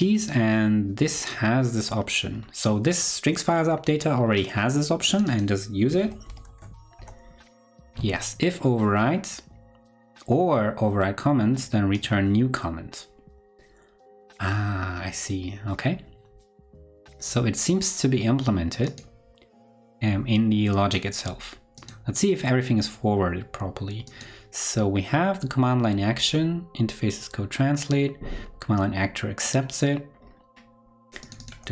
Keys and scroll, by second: 5.9 super+c, 6.2 super+f, 6.4 super+v.